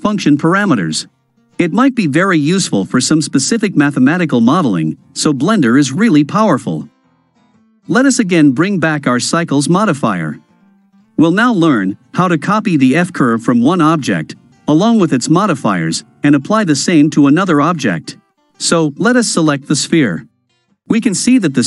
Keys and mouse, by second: 7.2 click, 8.4-10.1 middle drag, 11.3 KP_Decimal, 13.1-14.7 ctrl+middle drag, 21.4 KP_Decimal.